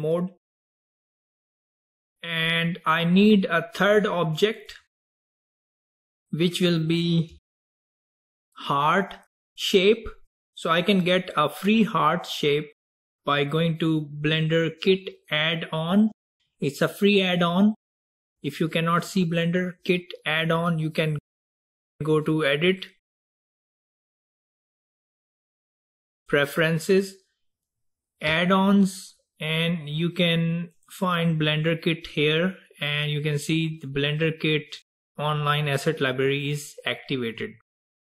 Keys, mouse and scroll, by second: 4.9 click, 7.9 ctrl+z, 15.9 click, 21.5-24.6 drag.